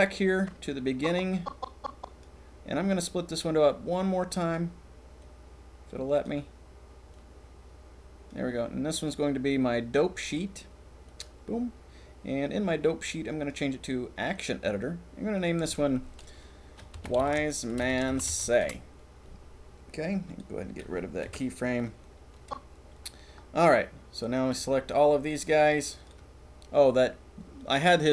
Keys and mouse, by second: 0.4-1.9 drag, 1.9 right click, 3.6 right click, 5.2 right click, 7.2-8.2 drag, 9.0-11.2 drag, 13.4-14.4 drag, 15.4-18.6 drag, 20.2 click, 21.3 Delete, 22.3 click, 22.8 middle click, 22.9 middle click, 24.5 c.